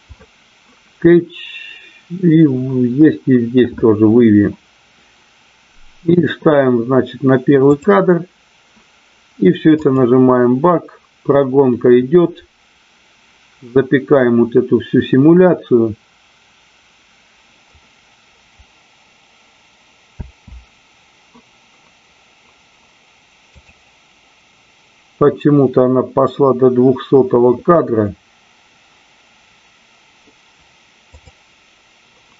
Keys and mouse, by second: 7.7 click, 9.9-32.3 drag.